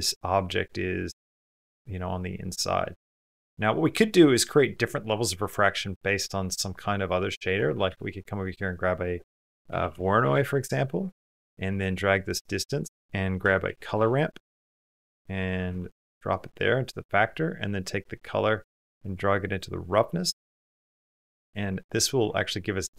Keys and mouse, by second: 1.4 middle click, 2.3 middle click, 2.3 middle click, 2.7 middle click, 6.8 click, 7.1 middle click, 7.7 shift+a, 10.3-13.1 typing, 11.5 click, 12.0 click, 12.4-14.8 drag, 17.0 middle click, 19.4 middle click, 20.1 click, 21.1 click.